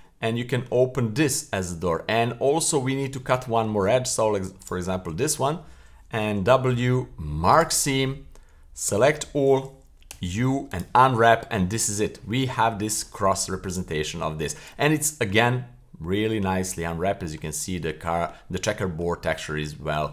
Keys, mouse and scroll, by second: 0.2-0.7 middle drag, 1.6-3.7 middle drag, 3.1 scroll up 1, 4.6 shift+right click, 5.1 shift+middle click, 6.2 w, 8.0-8.9 scroll down 2, 8.9 a, 10.1 u, 13.7-15.0 right drag, 15.0 middle click, 15.6-16.0 scroll up 2, 16.0-16.7 scroll down 2, 16.9-17.3 middle drag, 17.6-17.9 middle drag, 18.7 middle drag, 19.2-19.7 middle drag.